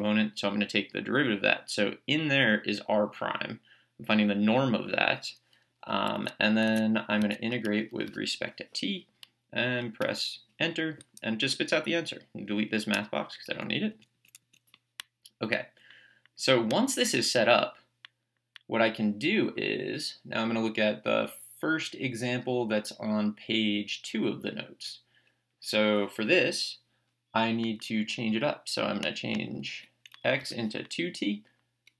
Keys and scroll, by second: 6.2 Tab, 8.1 t, 10.0 Return, 12.9 BackSpace, 13.9 Up, 30.3 Left, 30.4 2.